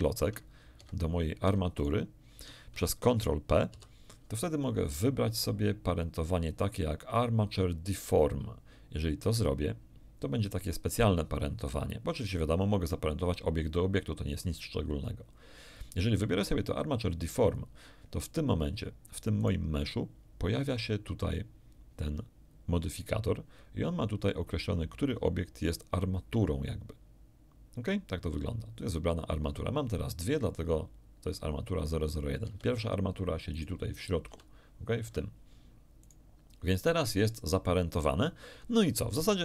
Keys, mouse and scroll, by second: 0.7 Escape, 1.7 shift+middle click, 3.7 ctrl+p, 17.4 click, 19.3 right click, 28.7 click, 32.4 Escape, 33.5 right click, 34.3 g, 35.0 Escape, 36.0 right click.